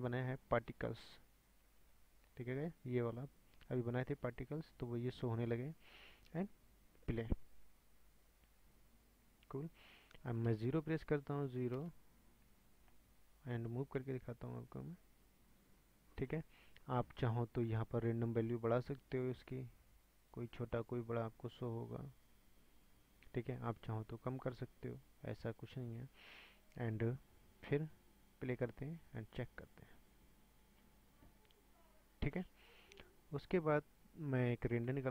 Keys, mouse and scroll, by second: 7.0-8.5 drag, 8.7 scroll up 3, 9.4 scroll down 1, 10.5 KP_0, 11.7 scroll up 3, 11.7 KP_0, 13.0-14.0 shift+middle drag, 14.0-15.3 scroll up 3, 15.3 click, 18.3-26.2 drag, 27.8 click, 28.4-31.4 drag, 32.9 click.